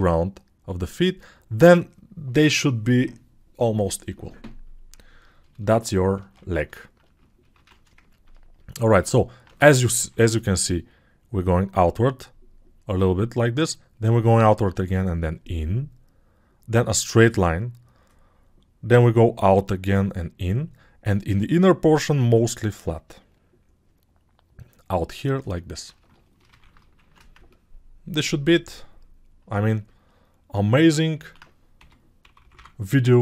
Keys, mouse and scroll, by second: 10.0 ctrl+shift+7, 31.3 alt+q, 31.8 g, 32.5 [.